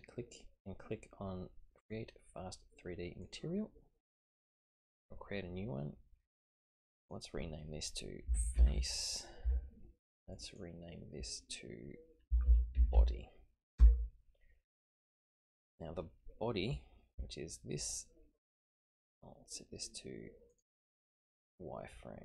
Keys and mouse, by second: 3.2 click, 6.8 click, 7.2-9.6 drag, 7.2 typing, 10.3 click, 10.5-14.9 drag, 17.2 Tab, 18.1 middle click, 20.5 click.